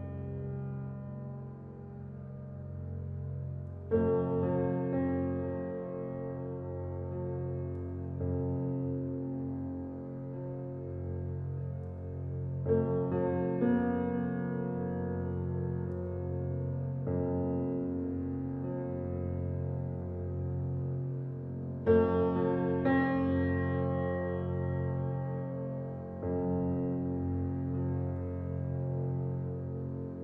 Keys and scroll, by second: 14.9 ].